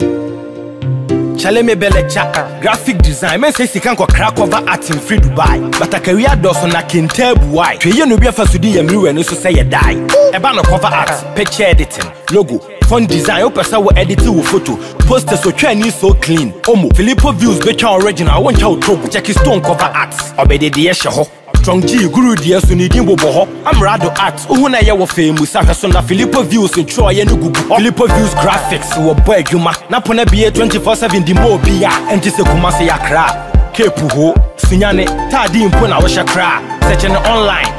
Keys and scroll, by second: 33.5 ctrl+t, 36.5 Return.